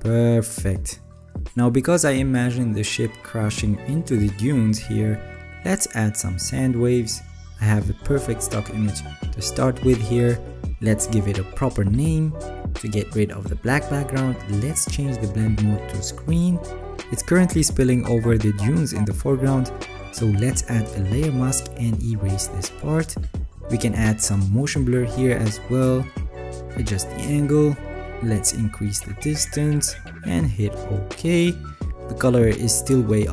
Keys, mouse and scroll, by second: 2.0-3.0 alt+scroll down 13, 3.7-4.4 alt+scroll down 4, 4.6-5.0 scroll down 3, 5.7 alt+scroll up 4, 6.9-7.3 alt+scroll up 1, 7.3 alt+scroll, 22.5 ctrl+z, 22.5 alt+right click.